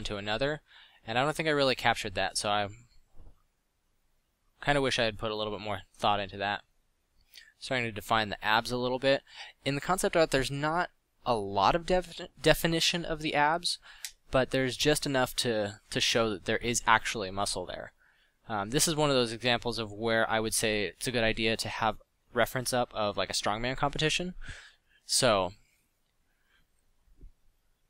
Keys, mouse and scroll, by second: 0.4 f, 5.7 f, 11.8 f, 12.5 f, 17.2 f, 18.7 f, 23.1 f, 27.0 f.